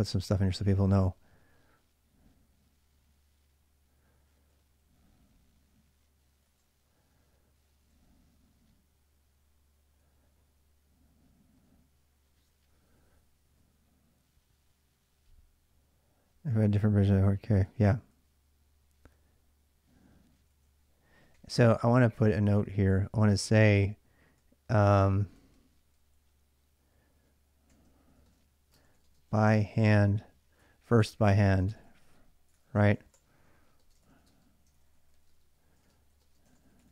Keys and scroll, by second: 0.0-0.8 typing, 4.3 j, 6.2 l, 6.6 j, 7.7 j, 9.8 j, 12.5 j, 12.7 j, 16.3-18.7 typing, 20.1-36.9 typing, 22.1 ctrl+[, 22.3 ctrl+j.